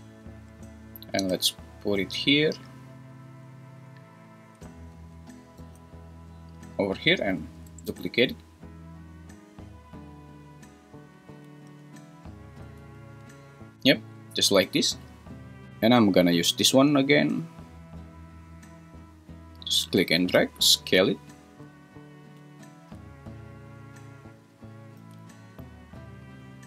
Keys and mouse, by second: 1.2 g, 3.3 click, 3.7 s, 5.6 g, 6.6 click, 7.9 shift+d, 11.6 r, 12.8 Escape, 20.4 s, 22.2 click, 25.0 g.